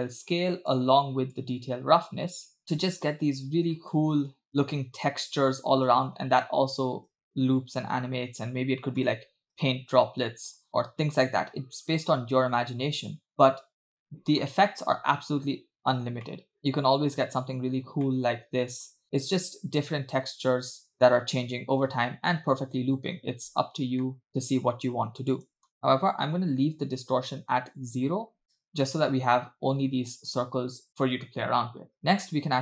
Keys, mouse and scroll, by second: 1.5-2.6 shift+drag, 2.9-4.0 scroll down 2, 4.0-4.8 scroll up 5, 5.1-6.0 scroll down 5, 6.0 space, 6.5 space, 7.2 space, 8.7-10.7 typing, 11.5-11.8 scroll down 2, 11.9-12.4 scroll up 2, 12.7-13.3 scroll up 3, 13.3 click, 15.5-16.2 scroll up 3, 16.3-16.6 middle drag, 18.3-19.0 middle drag, 20.4 space, 23.7 scroll down 2, 24.0 middle drag, 24.6-25.3 scroll up 3, 25.4-27.1 drag, 28.3 scroll up 2, 28.6 scroll down 1, 28.7-29.0 scroll up 2, 29.1 space, 30.3 space, 30.9-31.2 scroll down 3, 31.3-31.7 scroll up 3, 32.0 scroll down 1.